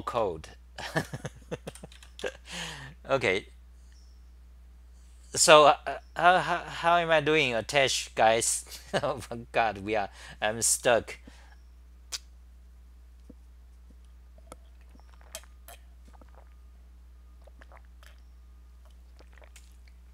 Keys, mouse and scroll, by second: 0.1-1.1 t, 1.7 g, 1.9 ;, 2.2 Home.